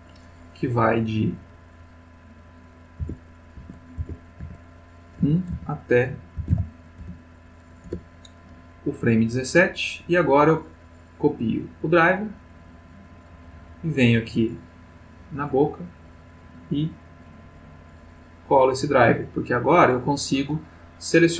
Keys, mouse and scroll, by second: 1.4 click, 3.0 1, 3.6 Tab, 3.9 1, 4.4 Tab, 5.2 1, 5.5 Tab, 6.4 1, 6.5 7, 6.9 Return, 7.8 Return, 10.5 right click, 13.2 click, 14.4 click, 16.4 click, 17.2 right click, 18.1 click, 19.9 click, 21.2-21.3 drag.